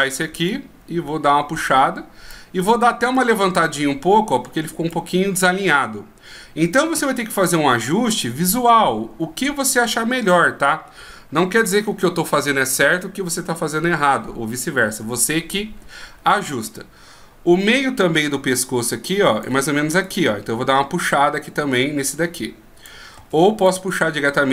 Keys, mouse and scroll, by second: 0.7 click, 3.4 click, 15.5-16.3 shift+scroll up 1, 18.4 d, 18.8 click, 19.6 d, 19.7 d, 20.2 right click, 21.3 click, 23.3 ctrl+z, 23.8 right click.